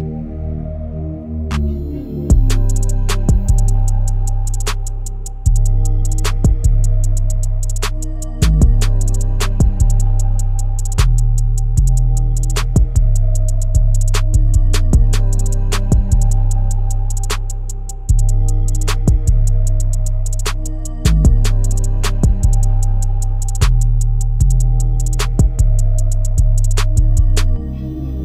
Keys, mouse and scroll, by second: 0.2 click, 1.0 g, 4.2 KP_0, 5.7-7.8 scroll up 2, 8.0 KP_7, 10.1 shift+click, 10.7 g, 12.3 KP_0, 13.9 scroll up 1, 14.4 ctrl+z, 15.2 ctrl+shift+z, 16.4 g, 22.4 KP_7, 23.3 s, 26.8 KP_7.